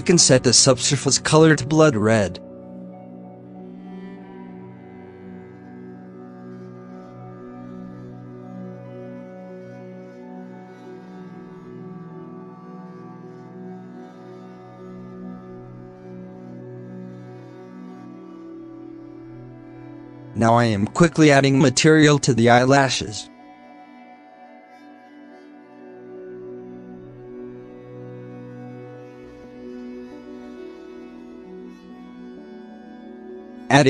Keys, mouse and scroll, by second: 2.0 click, 2.7 KP_0, 6.1-8.9 drag, 8.9 alt+a, 11.9 middle click, 12.5 click, 12.9 KP_0, 12.9 click, 13.0 KP_0, 13.1 click, 13.3 KP_0, 13.4 click, 13.4 KP_0, 13.7 ctrl+s, 14.9 z, 15.5 scroll down 2, 15.8-16.4 middle drag, 16.4 KP_Divide, 17.6 alt+h, 18.6 click, 19.0 scroll up 4, 19.4 g, 20.1 scroll down 1, 20.3-20.8 shift+middle drag, 20.8 scroll down 1, 21.1 g, 21.6-23.0 shift+middle drag, 23.0 click, 23.7-29.7 drag, 30.0 scroll down 2, 30.3 scroll up 1, 30.6-31.0 middle drag, 31.0 alt+a, 31.3 click, 31.7 scroll up 1, 31.9 Delete, 32.2 scroll down 1, 32.3 middle drag, 32.5 shift+a.